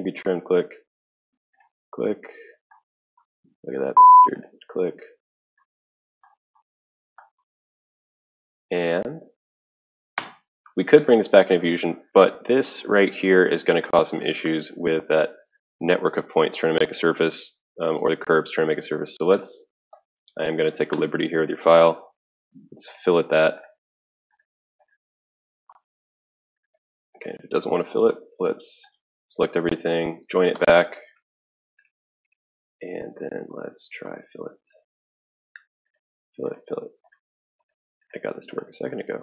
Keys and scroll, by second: 10.1 Return, 19.6-20.6 typing, 20.9 Return, 23.8 typing, 27.9 Escape, 28.1 Escape, 28.3 Escape, 28.9 ctrl+a, 29.6-30.8 typing, 32.9-35.4 typing, 37.9-39.2 typing.